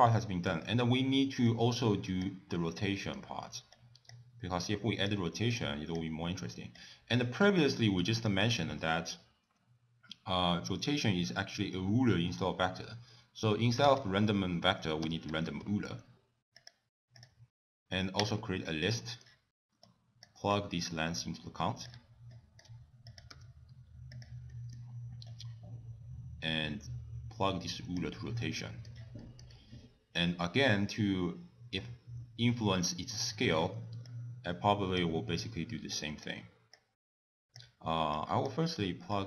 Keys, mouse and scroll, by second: 0.1 middle click, 0.1 scroll down 2, 1.5 click, 2.5 middle click, 3.8 click, 4.6 click, 5.5 click, 6.8 click, 7.4-7.9 scroll up 3, 7.7 middle click, 8.2 click, 8.6 ctrl+a, 18.2 click, 19.0 middle click, 19.9 click, 20.5 click, 22.3 shift+right click, 23.1 click, 23.3 g, 24.5 middle click, 25.3 click, 28.5 middle click, 29.2 middle click, 29.5-30.6 scroll up 1, 30.6 scroll up 1, 33.3 middle click, 34.1 click, 35.9 click, 36.8 click, 38.2 click, 39.1 click.